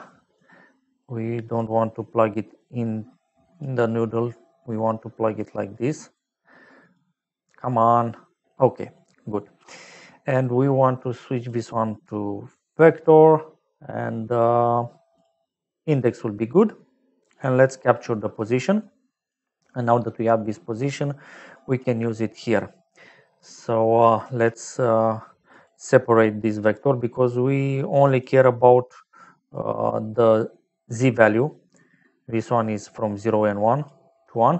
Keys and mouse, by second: 0.3 click, 2.5 click, 4.6 click, 5.8 click, 6.1 click, 7.6 click, 8.9 click, 11.3 click, 12.7 click, 15.1 click, 18.7 click, 19.8 middle click, 21.5 click, 22.9 middle click, 24.1 shift+a, 25.4 click, 28.1 click, 29.4 click, 30.2 click, 33.1 click.